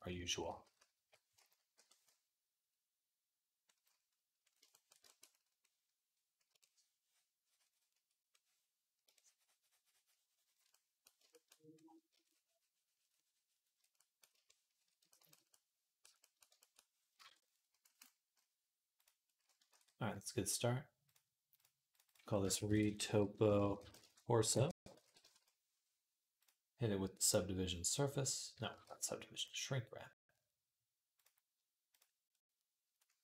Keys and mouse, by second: 0.0-1.5 typing, 2.8-8.8 drag, 2.8-8.8 middle drag, 2.8-8.8 right drag, 13.9-18.8 shift+drag, 13.9-18.8 shift+middle drag, 13.9-28.5 shift+right drag, 17.0 ctrl+Tab, 19.8 ctrl+s, 20.8 click, 21.8-28.5 drag, 28.7 ctrl+z, 31.0-33.2 right drag.